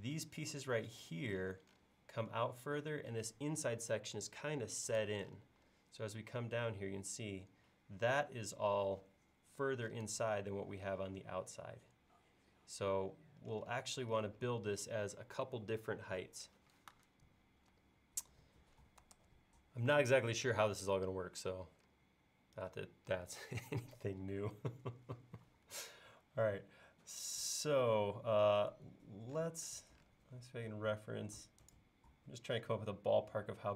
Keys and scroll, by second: 19.2 super+Tab, 25.5 l.